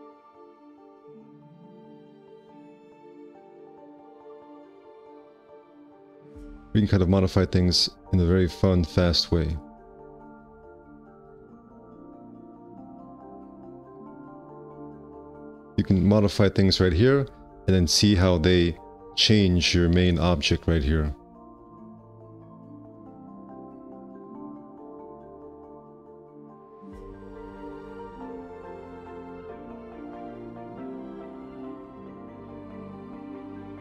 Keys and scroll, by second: 0.5 ctrl+c, 6.2 F4, 6.9 2, 8.1 F4, 9.2 5, 10.4 w, 14.8 5, 15.1 q, 15.6 F4, 19.1 F4, 22.5 `, 23.0 1, 27.5-29.3 typing.